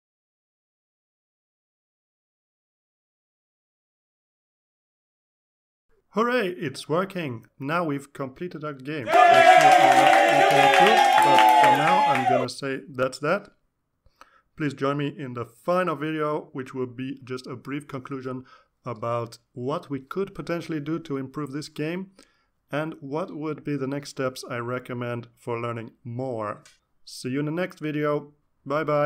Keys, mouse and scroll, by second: 2.7 click, 4.1 click, 5.5 click, 17.6 click, 20.5 click, 22.5 click, 24.0 click.